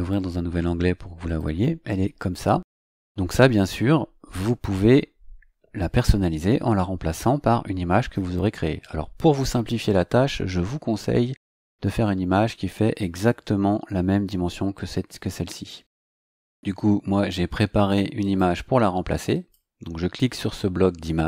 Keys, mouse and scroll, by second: 1.2 click, 15.5 right click, 18.2 click, 19.3 click.